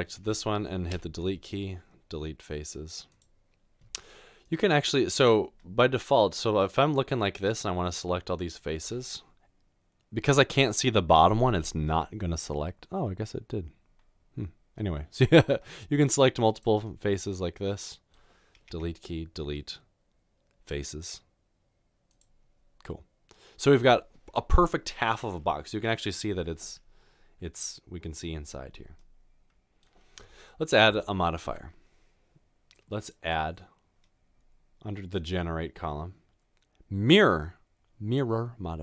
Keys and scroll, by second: 1.0 Delete, 18.7 Delete.